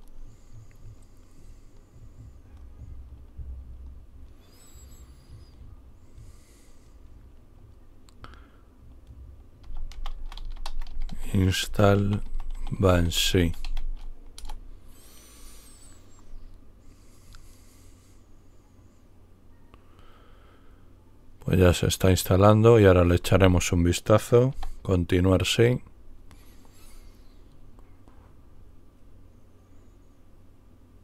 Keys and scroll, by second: 9.3-14.0 typing, 14.2 Return, 15.5 typing, 24.4 Return.